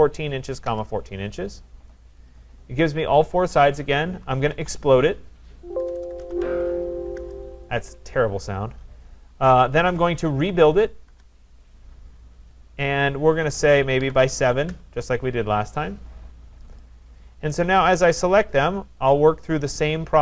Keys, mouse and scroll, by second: 0.7 Return, 2.3 click, 4.2-7.2 typing, 10.2-11.1 typing, 12.8 click, 13.4 Return, 13.9 typing, 14.6 Return, 16.8 click, 17.6 click, 19.1 click.